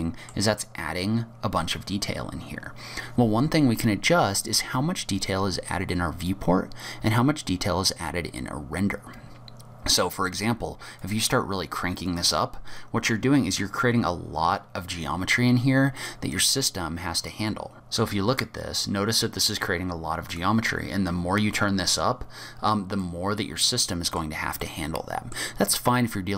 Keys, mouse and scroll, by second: 11.0 click, 12.1 click, 13.2 scroll up 4, 15.8 middle click, 15.8-17.4 scroll down 3, 17.4 middle click, 20.3 click, 21.5-22.3 scroll up 2, 22.4-23.0 scroll down 7, 23.0 middle click, 24.6 middle click.